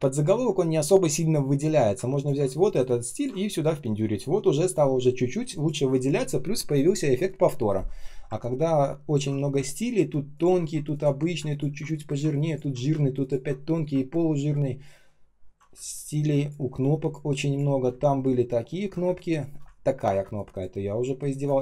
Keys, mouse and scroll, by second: 2.1 ctrl+click, 2.6 ctrl+alt+c, 3.0 ctrl+click, 3.4 ctrl+alt+м, 8.8 ctrl+scroll down 1, 9.5 space, 10.0 space, 10.3 ctrl+click, 10.8 ctrl+click, 11.4 ctrl+click, 12.4 ctrl+click, 13.1 ctrl+click, 14.1-14.6 ctrl+scroll down 1, 14.6 ctrl+scroll up 1, 15.3 ctrl+scroll down 1, 15.6 space, 16.1 space, 16.2 space, 18.0 ctrl+scroll up 1, 18.7 ctrl+scroll down 1, 18.9-20.6 typing, 19.8 ctrl+scroll up 1.